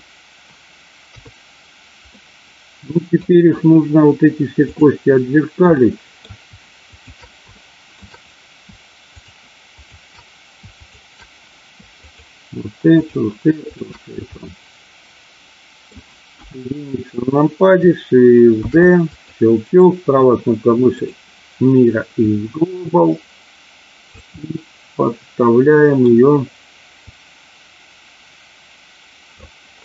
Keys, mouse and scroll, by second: 1.1 KP_3, 2.1-3.3 middle drag, 4.6 click, 5.8 middle click, 6.9 shift+click, 7.6 shift+middle click, 9.1 shift+click, 10.9 shift+click, 11.9 shift+click, 12.9 shift+click, 13.6 shift+click, 14.4-15.9 middle drag, 16.3 KP_1, 18.6 shift+d, 19.0 click, 19.8-21.1 right drag, 22.3-24.1 drag, 24.4-25.9 middle drag, 27.1-29.2 drag.